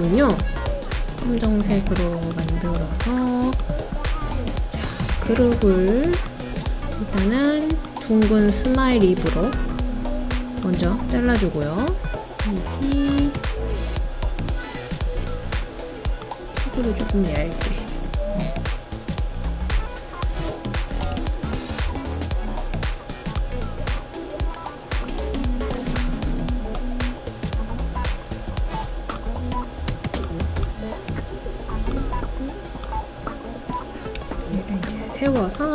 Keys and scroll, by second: 20.9 2, 21.0 Return, 34.2 d.